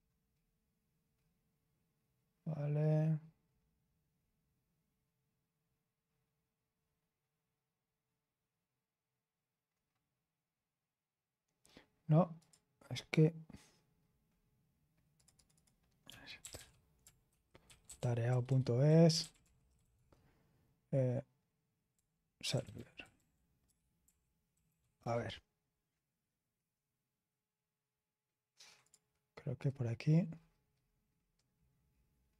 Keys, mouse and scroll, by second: 1.1-1.8 scroll down 1, 1.8-4.1 scroll down 3, 4.1-6.0 scroll up 2, 6.0-9.6 scroll up 1, 9.6-11.3 scroll up 1, 11.3-12.3 scroll up 1, 12.3 click, 14.3-15.1 scroll up 1, 15.1 click, 15.8-20.3 typing, 21.9-25.3 typing, 28.8 click, 30.3-32.3 scroll down 3.